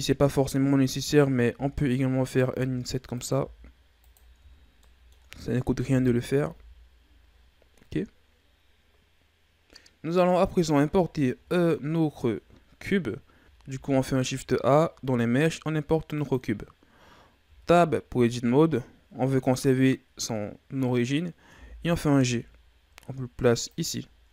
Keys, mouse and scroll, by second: 0.3 right click, 1.4 i, 2.4 i, 3.3 i, 4.3 Tab, 4.5 scroll down 3, 4.8-5.8 middle drag, 5.8 KP_1, 6.5 a, 6.9-7.3 scroll down 2, 8.3-10.6 scroll down 3, 10.6 scroll down 2, 12.5 scroll down 1, 13.4 scroll up 2, 13.6 shift+a, 17.4 Tab, 21.4 g, 24.0-24.3 ctrl+scroll up 4.